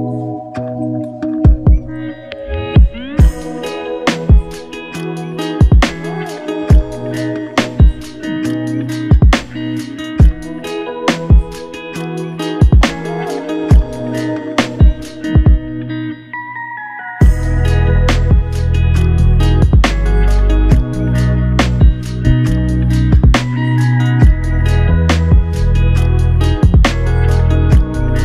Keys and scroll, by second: 10.7 typing, 11.9 Return.